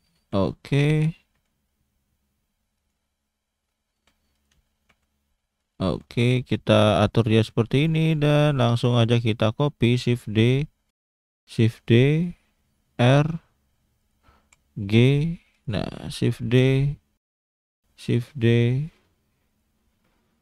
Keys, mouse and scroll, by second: 1.3 s, 4.0 g, 5.9 shift+d, 7.3 shift+d, 8.3 scroll down 1, 8.5 click, 9.2 shift+middle click, 9.9 shift+d, 11.2 shift+d, 13.0 r, 17.7 shift+d.